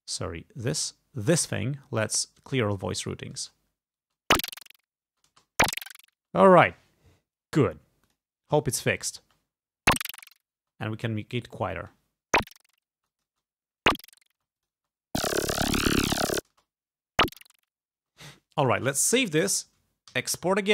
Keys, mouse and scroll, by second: 0.8 click, 1.5 right click, 2.5 click, 3.5 space, 4.1 space, 5.2 space, 6.2 space, 8.1 click, 9.2 click, 9.3 space, 10.7 space, 11.1 click, 11.8 space, 13.1 space, 13.1 click, 14.4 space, 14.7 click, 16.4 space, 16.5 click, 18.0 space, 19.2 ctrl+s, 20.2 alt+e.